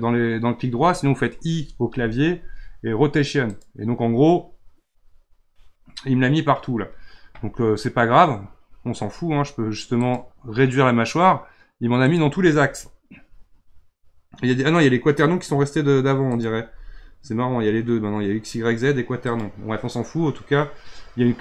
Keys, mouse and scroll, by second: 1.8 typing, 10.0 click, 12.0 click, 12.7-15.9 scroll down 4, 16.3 click, 19.2 click.